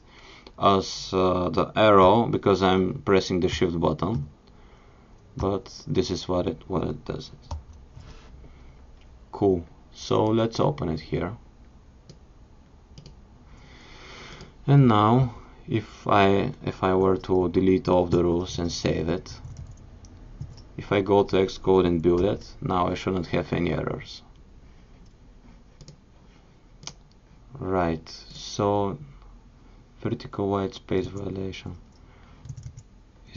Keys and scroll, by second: 2.0 shift+super+>, 4.2 shift+super+>, 5.4 shift+super+>.